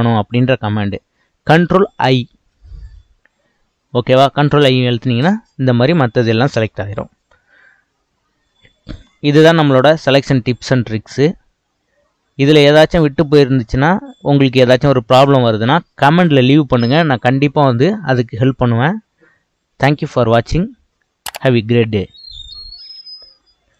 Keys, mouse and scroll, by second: 2.4 ctrl+i.